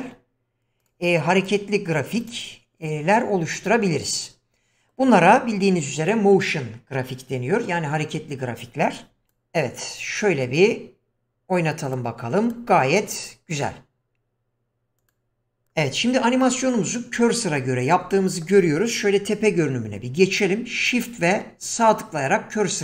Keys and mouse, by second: 0.8 click, 1.4 click, 2.3 click, 3.6-5.0 middle drag, 9.2 click, 11.8 click, 12.5 drag, 13.2 click, 15.0 click, 16.4-16.7 middle drag, 18.1-18.4 middle drag, 19.6 KP_7.